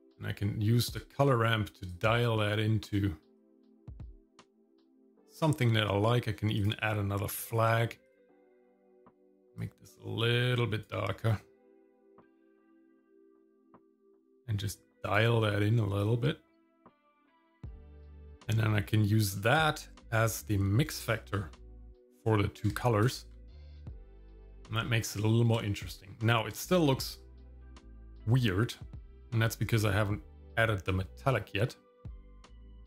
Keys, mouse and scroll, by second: 1.9 click, 3.4-5.4 drag, 6.6 click, 8.1 click, 8.5 click, 14.0-15.2 drag, 16.0-17.9 drag, 19.3-21.0 drag, 23.0 ctrl+shift+click, 24.2 shift+middle click, 24.9 middle click, 25.7 shift+middle click, 26.2 scroll up 1, 26.6 shift+middle click, 27.2 scroll down 1, 27.6 shift+middle click, 30.9-32.5 drag.